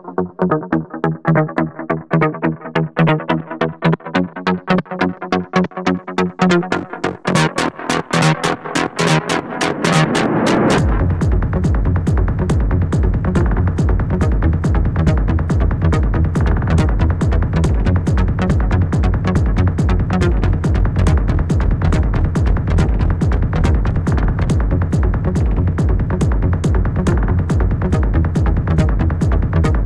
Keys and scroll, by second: 0.9 space.